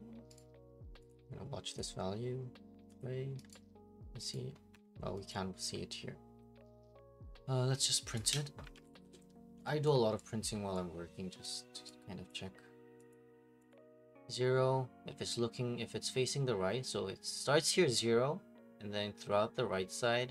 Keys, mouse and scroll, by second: 0.3 click, 1.1 click, 1.8 click, 3.0 click, 3.5 right click, 3.7 middle click, 4.3 right click, 4.7 Escape, 4.9-5.3 scroll, 5.3 click, 8.1 click, 8.4-9.7 typing, 9.8 click, 10.4 right click, 11.5 click, 12.3 click, 13.1 click, 13.7 click.